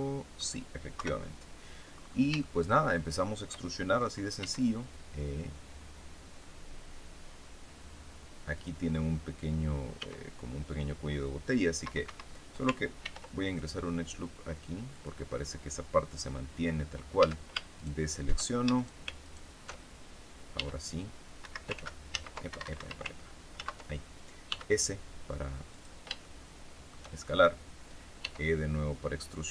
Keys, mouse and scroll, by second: 0.9 KP_3, 1.9-2.4 scroll up 1, 2.4-3.6 shift+middle drag, 4.3 e, 8.5 click, 9.9 s, 12.0 Escape, 13.0 ctrl+r, 13.5 ctrl+click, 14.8 click, 16.1 scroll up 2, 17.1 a, 17.7 alt+shift+right click, 18.7 shift+right click, 19.2 alt+shift+right click, 20.5 e, 21.3 Escape, 21.7 ctrl+s, 22.0 ctrl+z, 22.4 ctrl+Escape, 23.5 ctrl+z, 24.4 s, 25.6 click, 26.2 shift+middle click, 26.8 shift+scroll up 1, 28.1 e.